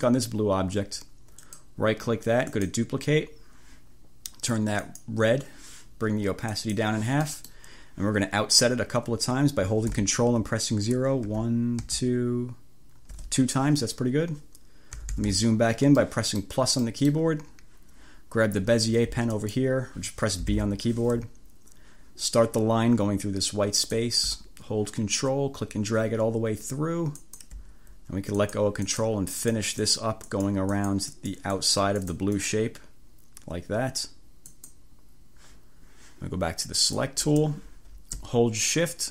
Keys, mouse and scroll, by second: 1.6 click, 2.6 click, 5.0 click, 6.6 click, 7.4 click, 11.3 ctrl+0, 15.0 =, 16.1 click, 16.9 click, 19.4 click, 20.6 b, 23.8 click, 27.2 click, 28.4 click, 28.9-29.3 scroll up 1, 29.4-31.6 scroll up 4, 31.7 click, 32.1 click, 32.5 click, 34.6 click, 37.0 click.